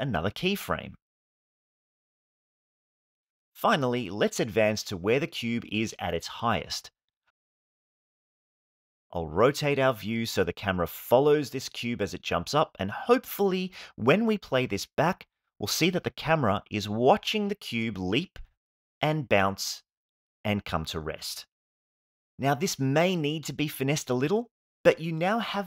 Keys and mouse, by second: 1.1 shift+middle click, 1.4-1.9 ctrl+middle drag, 2.0 middle click, 7.1 Home, 9.4-10.7 middle drag, 11.4-14.6 middle drag, 22.4 middle drag, 22.8-23.4 shift+middle drag, 24.5 middle click, 24.9 shift+middle click.